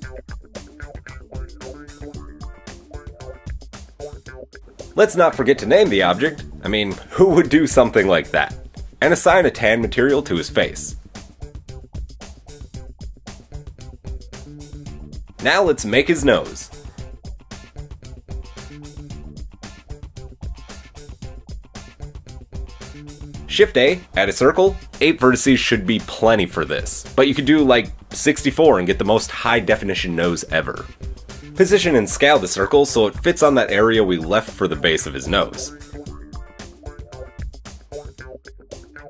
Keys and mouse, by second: 0.0 Tab, 0.0-1.0 middle drag, 1.0-3.0 drag, 3.0-3.6 middle drag, 3.6 click, 3.7-5.0 middle drag, 5.0-8.0 drag, 8.0-10.1 middle drag, 10.1 click, 10.2-11.1 middle drag, 11.1-19.1 drag, 13.4 middle click, 13.4 right click, 15.4 KP_1, 19.5-26.8 shift+middle drag, 21.5 KP_1, 23.9 shift+a, 29.2 Tab, 30.3 r, 30.7-31.9 drag, 32.1 KP_3, 33.5 shift+middle click, 34.9 s, 36.8-37.3 shift+middle drag, 37.9-39.0 drag, 38.8 Tab.